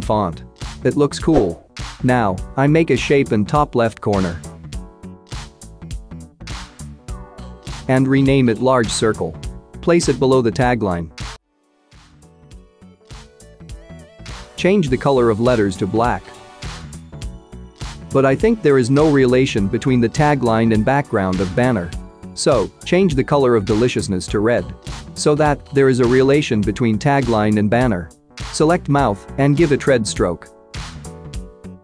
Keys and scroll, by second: 9.6-13.6 typing, 10.8 Return.